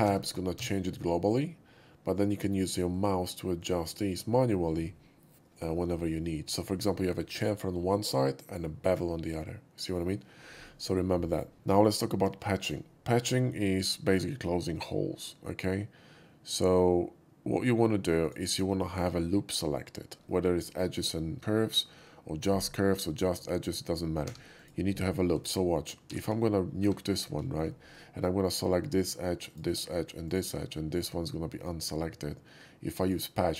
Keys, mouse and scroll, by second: 0.5 Tab, 2.9 click, 3.5 click, 11.6 shift+middle drag, 12.0 shift+middle click, 12.5 shift+middle click, 18.2 click, 24.3 3, 24.5 click, 26.0 shift+x, 26.4 middle click, 26.7 2, 27.5 shift+middle click, 28.4 shift+click, 29.5 shift+click, 30.2 shift+click, 33.0 shift+click.